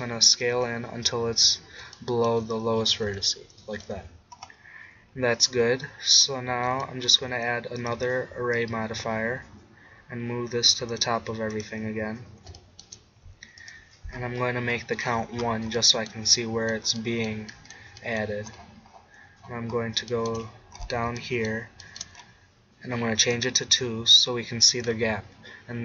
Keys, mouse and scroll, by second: 0.4-2.2 drag, 3.1 Tab, 4.0 z, 12.6 middle click, 13.2 middle click, 13.6 click, 14.4 middle click, 15.4 middle click, 23.4-25.8 drag.